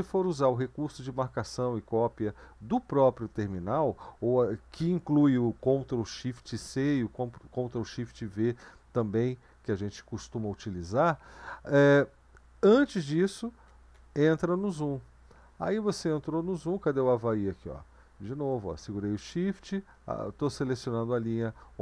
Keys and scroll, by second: 13.9 ctrl+b, 14.6 z.